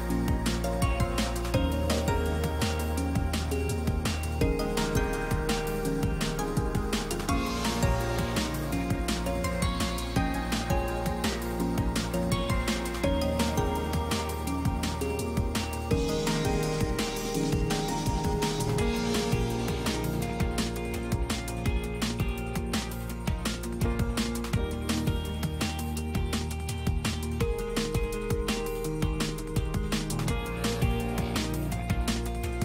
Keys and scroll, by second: 4.5 space, 11.1 space, 17.9 space, 22.4 space, 25.6 space.